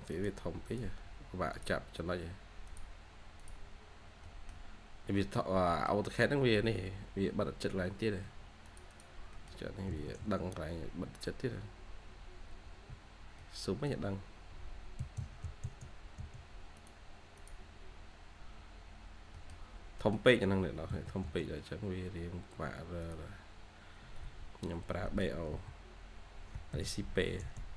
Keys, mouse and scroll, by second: 1.0-2.1 scroll up 1, 3.6 scroll down 1, 4.1 middle click, 4.8 scroll down 1, 5.0 scroll up 1, 5.1 middle click, 6.1 scroll up 1, 7.3 Escape, 7.6 scroll up 1, 8.2 scroll up 1, 8.8 double click, 9.2 middle click, 9.8 j, 10.7 scroll down 1, 10.8-11.4 scroll up 1, 12.0-13.0 scroll up 1, 13.0 typing, 13.3 middle click, 14.0 scroll up 1, 14.0-14.9 scroll down 1, 14.9-15.3 typing, 17.6 scroll, 17.6-19.1 scroll down 1, 19.0-21.3 typing, 23.7 scroll down 1, 23.9 Escape, 24.1 Escape, 25.0 Escape, 25.0 middle click, 26.4-27.1 typing.